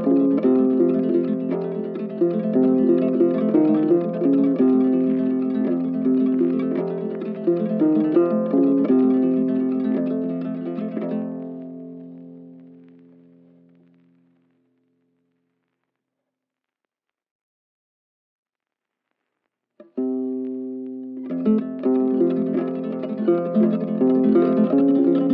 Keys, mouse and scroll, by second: 3.8 ctrl+shift+click, 4.2 ctrl+shift+click, 4.6 ctrl+shift+click, 4.9 ctrl+shift+space, 9.2 z.